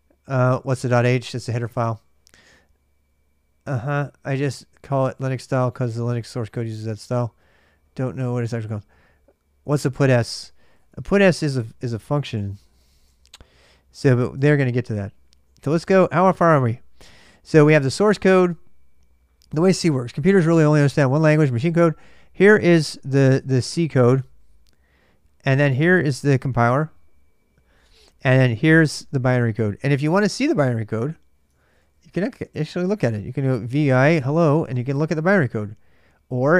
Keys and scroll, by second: 10.2-14.3 typing, 15.4 super+Tab, 31.3-36.4 typing, 35.2 ctrl+[.